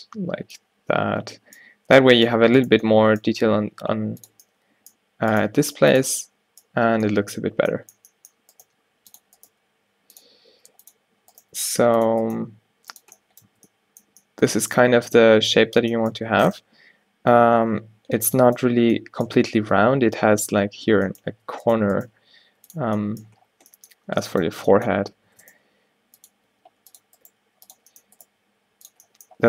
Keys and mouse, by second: 0.3 Tab, 3.4 g, 4.8 middle click, 5.6 g, 6.2 Tab, 7.7 Tab, 8.7 g, 9.6 g, 10.6 g, 11.5 g, 12.5 g, 13.6 Tab, 21.5 Tab, 22.1 g, 22.9 Tab, 24.8 Tab, 25.1 Tab, 25.4 Tab, 25.6 g, 26.5 g, 27.4 g, 28.4 g.